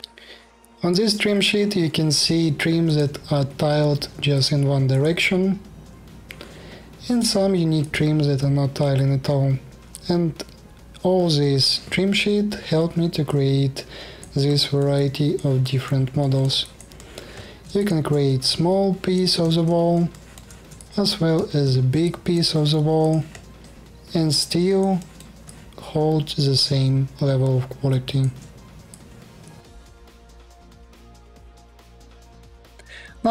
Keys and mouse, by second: 2.5 click, 4.0 click, 4.6 click, 7.5 click, 12.7 middle click, 13.0-15.1 alt+drag, 15.4-17.6 alt+drag, 17.8 click, 17.9 middle click, 18.1-19.1 alt+drag, 19.3 space, 19.3 KP_1, 19.9 alt+click, 20.6 ctrl+shift+middle click, 21.0 space, 21.2 KP_1, 21.8 alt+click, 23.2-26.4 alt+drag, 29.0 alt+click.